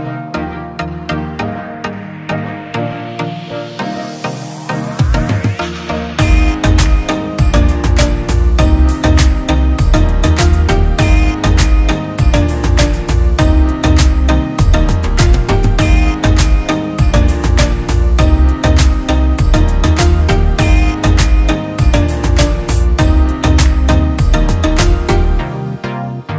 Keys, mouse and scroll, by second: 2.2 Escape, 3.5 click, 3.5 click, 5.7-6.6 ctrl+click, 7.3-7.9 drag, 7.9 ctrl+z, 8.7 shift+click, 9.3 Escape, 10.3 ctrl+click, 10.7 ctrl+z, 11.5 shift+click, 12.3 t, 12.7 Escape, 13.4 click, 14.9 click, 16.2 Escape, 16.8 click, 16.9 click, 18.5 Escape, 18.8 click, 19.3 shift+click, 21.2 Escape, 21.7 click, 22.1 Delete, 23.1 click, 23.2 Delete, 24.9 click, 25.6 shift+click.